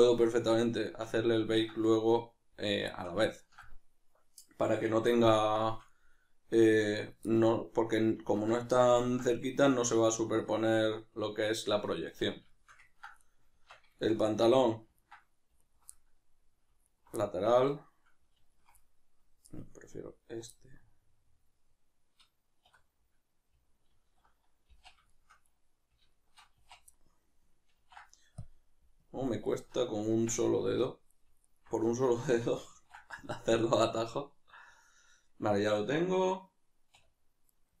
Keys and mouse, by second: 0.9-13.2 shift+middle drag, 13.2 right click, 13.5 Tab, 14.0-15.6 shift+middle drag, 15.6 alt+right click, 15.9-16.9 middle drag, 16.9 alt+right click, 17.2-18.5 middle drag, 18.5 alt+shift+right click, 18.8-20.2 middle drag, 20.2 alt+right drag, 20.5-26.1 middle drag, 22.7 \, 23.9 alt+q, 26.1 alt+shift+right click, 26.6 z, 26.9-31.5 middle drag, 27.7 ctrl+e, 29.0 KP_Decimal, 31.5 alt+right click, 31.9-36.9 middle drag, 32.7 ctrl+e, 36.9-37.8 middle drag.